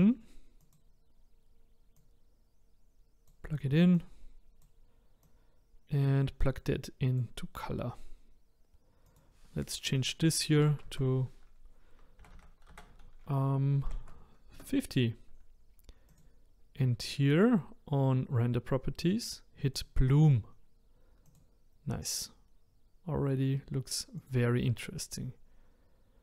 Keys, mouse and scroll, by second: 7.2 click, 14.5 BackSpace, 16.7 click, 19.7-22.0 drag, 22.0-26.2 middle drag.